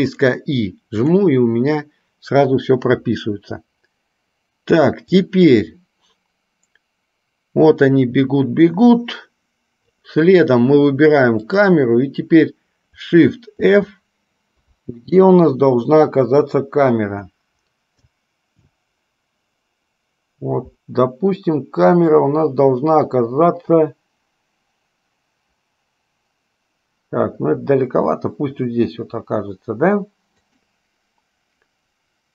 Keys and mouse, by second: 5.4-10.1 drag, 11.6 click.